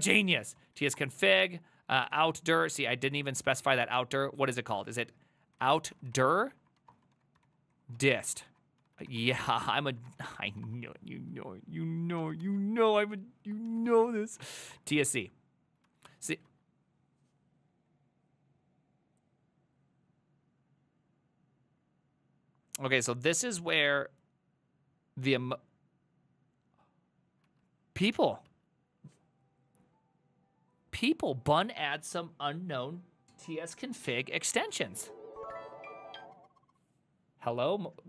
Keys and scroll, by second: 0.0-2.8 typing, 3.2 Return, 3.5 ctrl+c, 3.8 ctrl+d, 3.8-11.1 typing, 9.8 ctrl+c, 12.2 ctrl+a, 12.4 2, 13.7 ctrl+a, 13.9 ctrl+a, 14.1 ctrl+c, 14.2-15.1 typing, 16.5 alt+{, 28.5 alt+{.